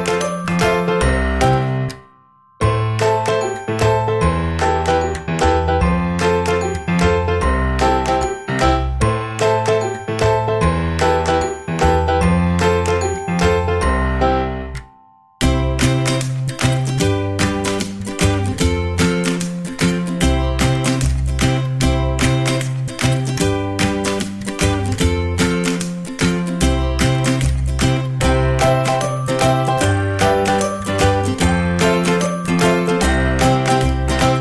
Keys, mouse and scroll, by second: 2.1-3.2 drag, 3.2-5.5 right drag, 9.5 a, 11.4-12.9 drag, 13.0 click, 13.0 right click, 13.2 click, 13.2-14.7 right drag, 15.0-18.7 drag, 15.0 right click, 18.7-22.0 right drag, 22.0-25.1 drag, 25.1 right click, 25.3-27.0 drag, 27.0-28.1 right drag, 28.1-34.0 drag, 34.0 right click.